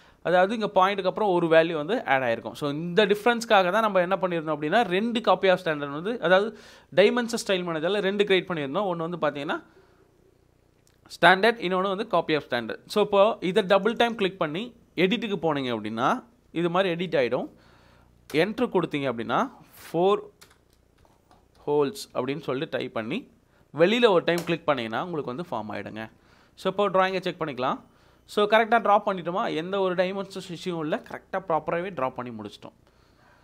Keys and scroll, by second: 16.2 Right, 18.3 Return, 20.4-22.6 typing, 26.0 Escape.